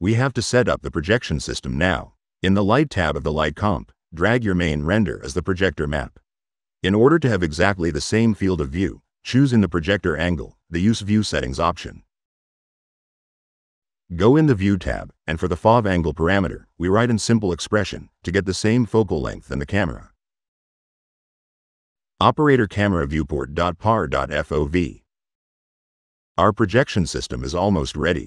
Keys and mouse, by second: 1.3 click, 3.5 click, 5.2-6.9 drag, 10.6 click, 11.7 click, 15.0 click, 17.5 click, 18.8 click, 18.9 click, 24.5 click, 26.0 click.